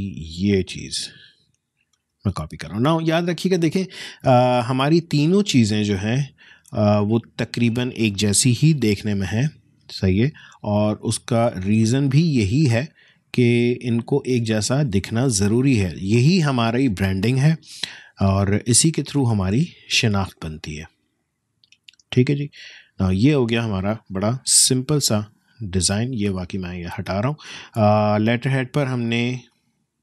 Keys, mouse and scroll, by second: 0.9 shift+click, 1.9 ctrl+shift+c, 3.5 shift+click, 5.8 shift+click, 8.6 ctrl+shift+v, 10.2-14.9 shift+drag, 14.9 alt+shift+scroll up 1, 16.0-18.6 shift+drag, 18.6-20.8 drag, 20.8-21.2 alt+scroll down 1, 22.1 space, 22.4 click, 22.6 space, 23.5 click, 24.6 BackSpace, 25.1 BackSpace, 25.2 click, 25.4 BackSpace.